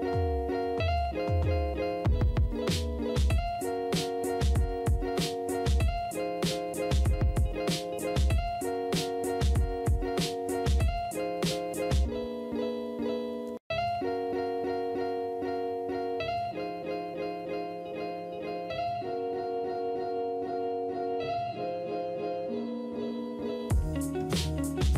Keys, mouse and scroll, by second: 9.2 right click, 15.7 typing, 16.7-18.4 typing.